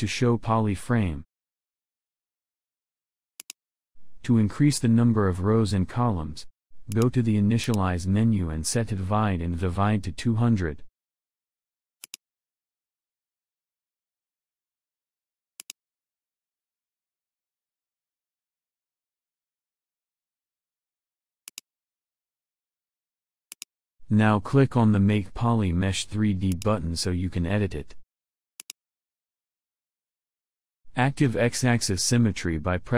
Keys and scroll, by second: 31.6 x.